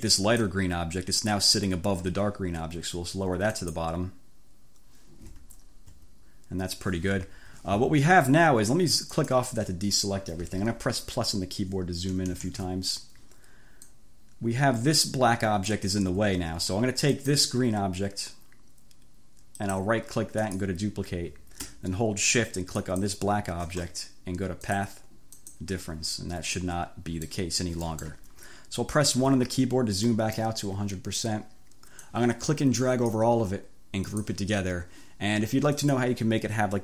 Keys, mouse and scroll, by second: 0.3 click, 3.7 click, 4.0 middle click, 5.6-6.0 ctrl+scroll up 2, 7.5 1, 9.2 click, 12.1 =, 13.9-15.9 drag, 16.3 ctrl+z, 17.2 click, 19.6 click, 20.5 click, 22.8 shift+click, 24.2-24.7 scroll up 2, 24.7 click, 25.4 click, 26.6 click, 27.9 click, 28.1 scroll up 1, 28.9 1, 30.2 click, 32.1-33.5 drag, 34.2 click, 35.9 click.